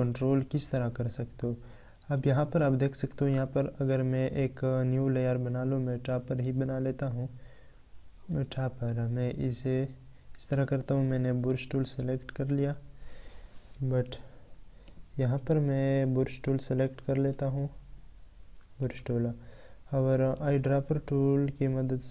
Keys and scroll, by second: 13.9 ctrl+z, 18.7 ctrl+z.